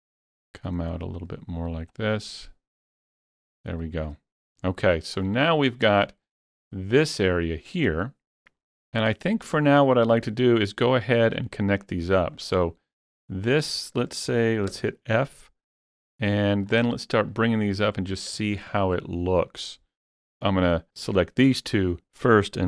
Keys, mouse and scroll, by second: 2.2-3.5 drag, 3.6 scroll down 3, 5.7 scroll down 3, 6.1-8.8 shift+middle drag, 6.8-8.8 shift+middle drag, 8.9 scroll up 2, 11.8 click, 12.4 shift+click, 13.0 shift+click, 13.6 shift+click, 14.7 f, 16.3 shift+middle click, 16.9 scroll up 1, 17.3 shift+middle click, 18.1 scroll down 3, 18.4 shift+middle click, 18.5 shift+middle click, 20.1 f, 20.3 f, 20.8 click, 20.8 f.